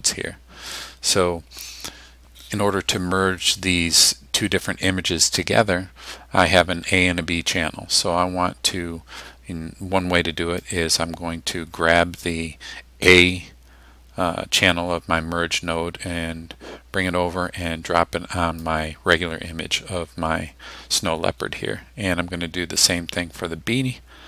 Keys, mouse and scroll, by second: 10.6-18.8 drag, 22.8-24.2 drag.